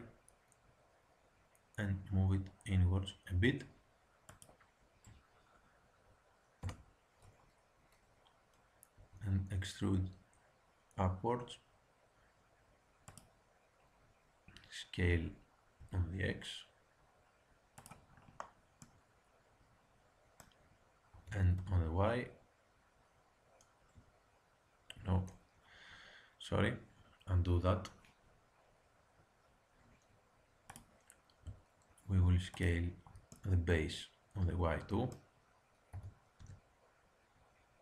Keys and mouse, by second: 6.5 KP_1, 8.9 e, 15.0 s, 21.0 s, 30.6-32.4 drag, 33.0 click, 33.2-34.4 middle drag, 35.9 s.